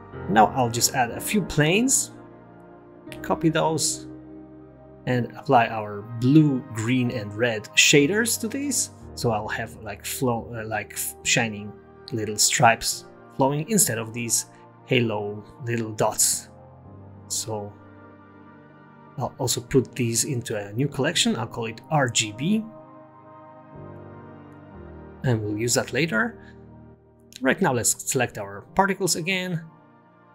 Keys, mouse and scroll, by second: 2.9 Tab, 2.9 g, 3.1 s, 4.7 s, 5.2 Tab, 5.6 shift+d, 6.6 click, 6.6 shift+d, 7.2-7.6 scroll down 9, 7.5 click, 7.8 click, 8.4 click, 9.9 click, 10.6 click, 11.2-12.1 scroll down 4, 12.1 click, 12.5 0, 13.6 click, 14.8 click, 15.2 click, 15.8 click, 16.4 click, 16.6 click, 17.2 click, 17.9 click, 18.6 click, 19.0 scroll up 3, 19.1 space, 19.2-19.7 scroll down 4, 19.7 space, 20.0 click, 20.2 click, 21.2 m, 25.8 click, 28.3 click, 28.7-29.2 scroll up 2, 29.2-29.8 scroll down 1, 29.8-30.3 scroll down 2, 29.9 click.